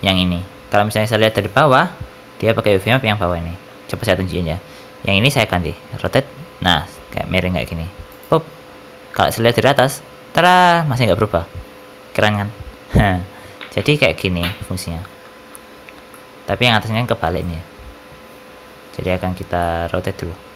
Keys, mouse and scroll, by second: 1.1 middle click, 2.7 click, 5.9 r, 9.8 middle click, 15.4 ctrl+z, 16.0 middle click, 19.5 middle click.